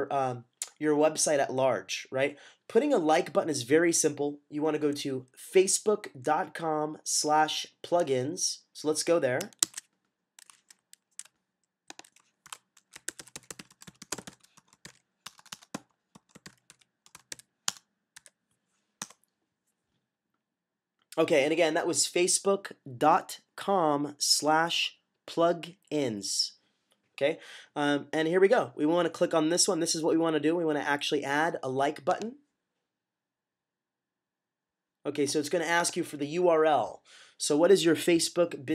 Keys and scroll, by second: 9.5 Tab, 12.3-18.0 typing.